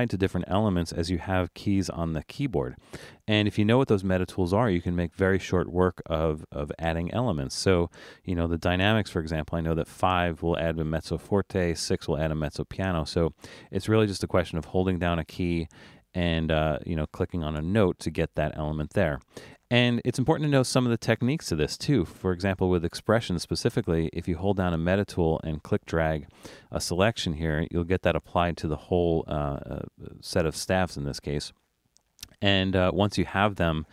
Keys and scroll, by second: 9.5 5, 11.9 6, 17.6 BackSpace, 24.7-26.7 5, 27.1 5.